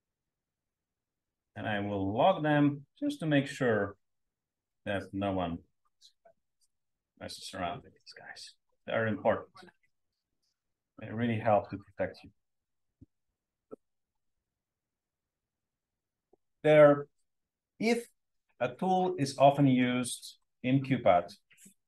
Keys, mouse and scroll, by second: 0.0-1.3 typing, 2.4 click, 5.6-6.1 drag, 6.6 click, 19.2 click, 21.4-21.8 drag.